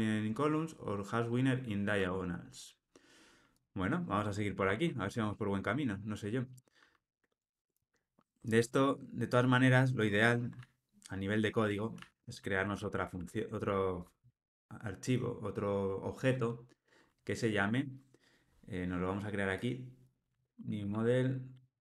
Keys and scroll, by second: 1.9 Tab, 10.6 super+z, 11.1 super+z, 11.9 super+z, 12.5 super+z, 13.2 super+z, 20.8 super+n.